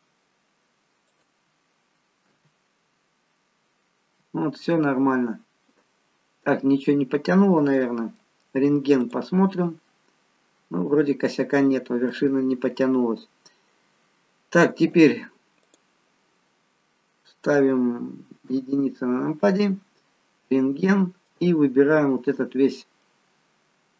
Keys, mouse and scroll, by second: 2.3 f, 3.0-3.8 scroll up 8, 3.8 scroll down 1, 4.0-4.8 scroll down 9, 4.8 middle click, 9.0 click, 9.7 middle click, 15.6 click, 18.6 KP_1, 20.6 click, 21.3 click, 23.1 middle click.